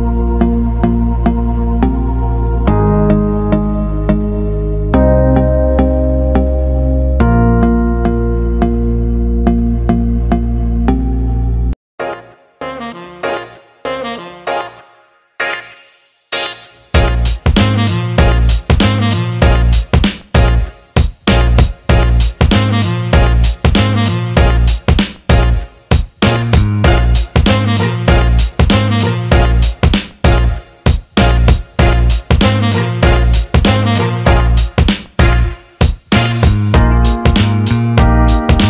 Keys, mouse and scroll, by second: 0.2 click, 1.3 click, 2.3 click, 2.5-4.9 drag, 7.4 click, 9.3 alt+middle click, 9.7 ctrl+alt+middle click, 10.4 ctrl+alt+middle click, 10.7 alt+shift+middle click, 12.2 click, 16.3 click, 17.2 alt+middle click, 19.3 click, 19.5 click, 22.1 alt+shift+middle click, 23.5 click, 23.9-25.7 drag, 27.0 click, 27.5 alt+shift+middle click, 28.4-31.7 drag, 33.3 click, 35.1 click, 36.1-36.5 drag, 37.4-37.9 alt+middle drag, 38.2 middle click.